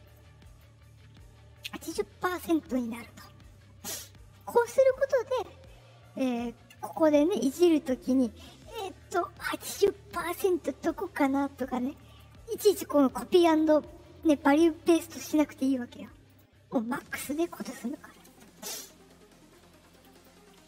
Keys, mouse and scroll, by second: 0.4 right click, 4.9 click, 6.7 click, 8.0-11.5 drag, 12.0 right click, 16.2 click, 17.1 click, 19.9 click, 20.1 click, 20.6 click.